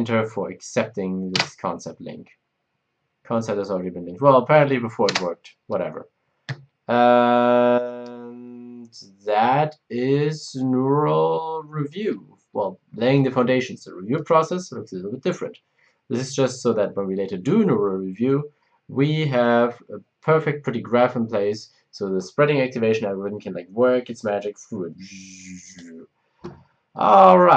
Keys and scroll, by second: 1.3 space, 1.3 Return, 5.1 Return.